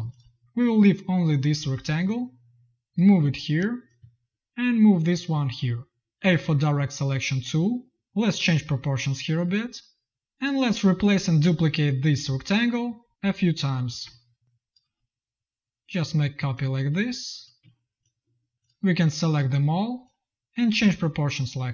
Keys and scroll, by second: 6.1 a, 10.2 ctrl+z, 14.4 z, 14.7 v.